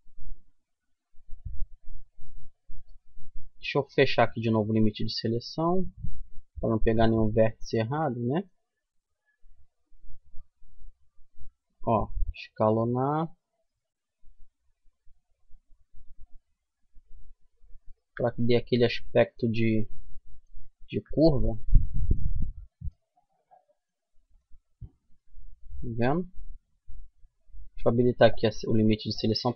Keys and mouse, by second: 1.6 a, 3.1-4.7 drag, 4.7-7.4 middle drag, 9.0-10.8 right drag, 10.6 s, 12.8 click, 13.6-14.6 middle drag, 15.2 middle click, 15.6 middle click, 17.2 Tab, 18.0-19.3 middle drag, 21.3 middle click, 22.5-23.8 middle drag, 23.9 middle click, 24.3 Tab, 25.4 middle click, 25.7 middle click, 26.7 middle click, 27.9-29.2 middle drag.